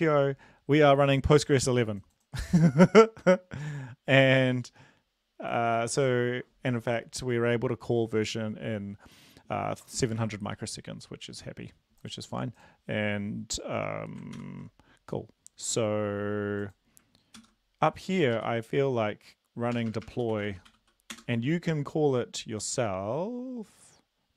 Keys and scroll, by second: 14.3 ctrl+l, 17.4 ctrl+c, 18.3 Up, 19.7-20.8 typing, 21.1 Return.